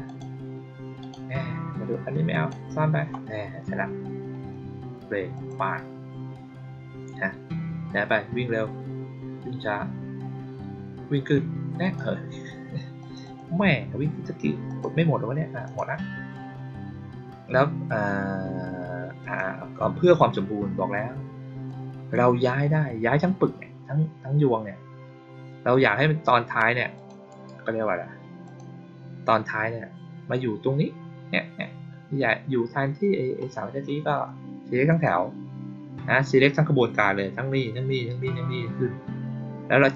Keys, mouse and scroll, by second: 0.0 click, 0.9 click, 2.2 click, 5.2 click, 11.7 click, 12.9 click, 13.1 click, 14.6 click, 15.5 click, 19.1 click, 21.6-22.0 drag, 26.9 click, 27.2 right click, 28.3 click, 34.8 click.